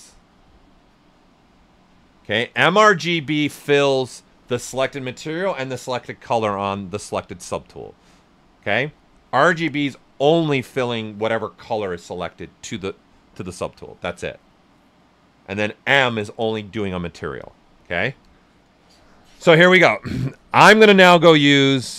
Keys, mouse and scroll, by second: 20.6 click.